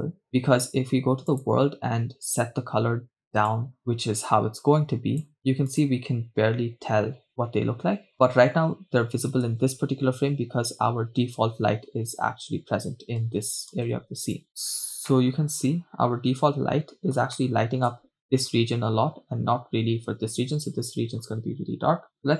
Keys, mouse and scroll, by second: 1.4-2.4 drag, 5.8 click, 9.7 shift+space, 13.8 shift+space, 15.1 scroll down 2, 15.1 KP_0, 15.5-17.2 middle drag, 17.5-18.1 shift+middle drag, 22.2-22.3 scroll down 2.